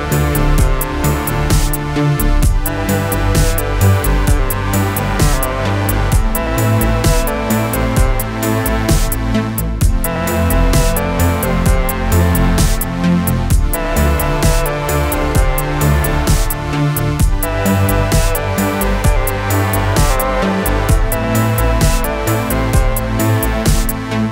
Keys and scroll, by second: 4.1 Left, 6.2 alt+space, 7.3 alt+space, 7.9 alt+space, 9.7-12.6 typing, 23.1 shift+Left.